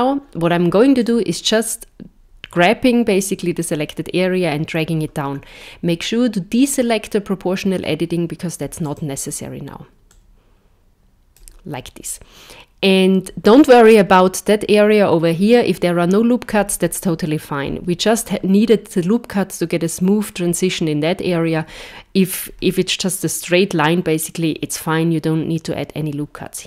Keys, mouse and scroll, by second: 1.0 click, 8.8 click, 10.1 click.